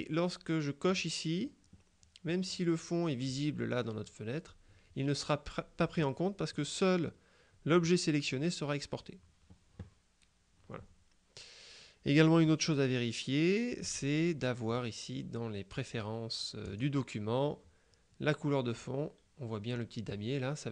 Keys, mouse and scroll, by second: 1.0 click, 13.9 click, 14.8 click, 16.7 click.